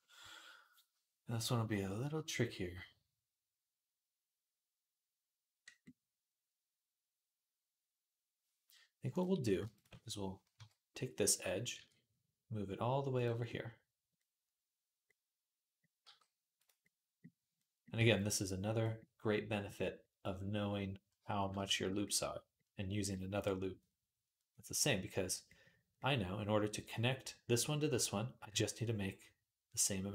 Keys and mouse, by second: 0.2-8.9 middle drag, 8.9 click, 9.0 middle click, 9.5 shift+click, 9.5 shift+a, 9.6 shift+middle click, 10.3 KP_3, 11.5 e, 15.8 g, 19.7-30.1 middle drag.